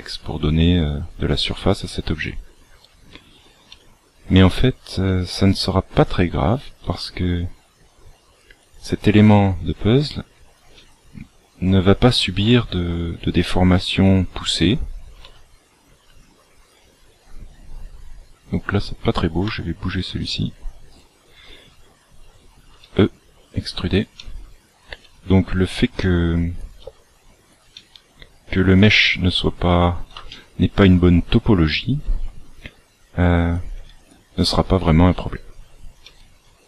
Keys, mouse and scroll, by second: 0.7 e, 1.8 e, 5.0 e, 6.8 e, 9.8 e, 10.6 e, 12.6 g, 15.2 g, 18.5 right click, 19.4 g, 20.8 right click, 22.7 e, 24.1 e, 25.0 e, 25.9 e, 27.7 e, 28.9 e, 30.2 shift+middle click, 32.0 e, 33.7 e, 36.0 e.